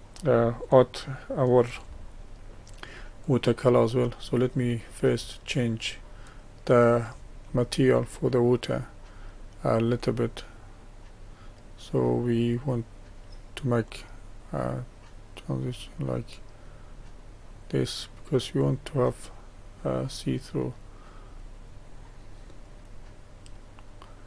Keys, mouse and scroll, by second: 3.4 click, 4.1-14.0 middle drag, 14.0-18.6 drag, 19.1-21.8 middle drag, 21.8-22.4 scroll up 1, 22.4-23.4 scroll up 1, 23.4-24.2 middle drag.